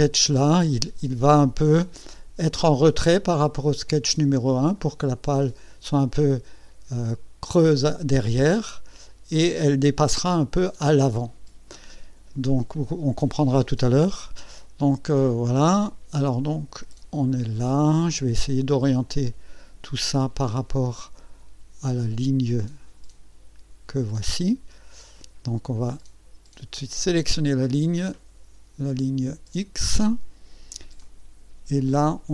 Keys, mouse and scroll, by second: 0.7 scroll up 1, 3.5 scroll down 2, 15.6-18.4 drag, 19.0-23.5 drag, 26.9 click, 28.9 click, 31.0 click.